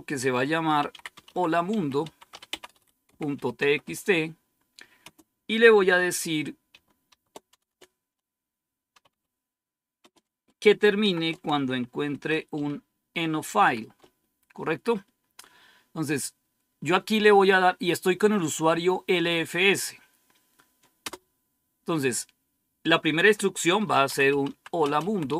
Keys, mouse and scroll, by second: 0.5-4.9 typing, 6.7-7.6 typing, 8.8-9.9 typing, 10.9-13.5 typing, 20.9 Return, 23.6-25.3 typing.